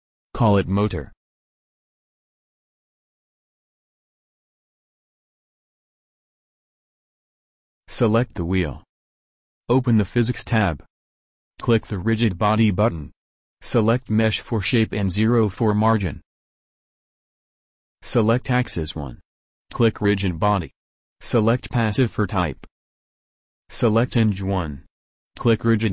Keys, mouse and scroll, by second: 2.9-4.4 drag, 9.7-14.2 drag, 14.5-16.1 drag, 18.4 click, 19.3-23.7 middle drag, 23.7-25.4 drag.